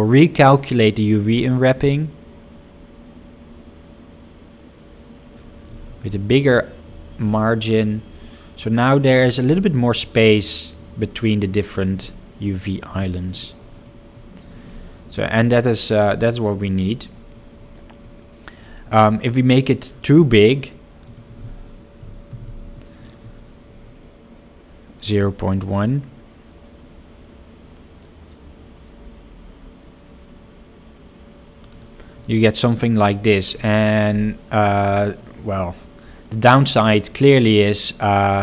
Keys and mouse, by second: 7.8 middle drag, 9.2 middle click, 11.1 middle click, 11.4 middle click, 12.1 middle click, 12.5 middle click, 13.4 middle click, 13.7 middle click, 16.2 middle click, 16.8 middle click, 17.3 middle click, 17.7 middle click, 18.2 middle click, 19.2 middle click, 19.5 middle click, 21.0-31.0 drag, 32.4 middle click, 33.1 middle click, 34.8 middle drag, 37.1 middle click.